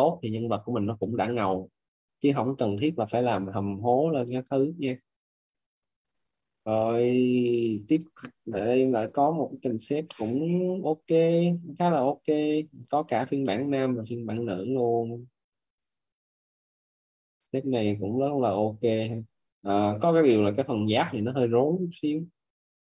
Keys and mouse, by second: 4.3 click, 6.6 click, 9.9 middle click, 10.6 click, 13.2 middle click, 14.4 click, 22.7 middle click.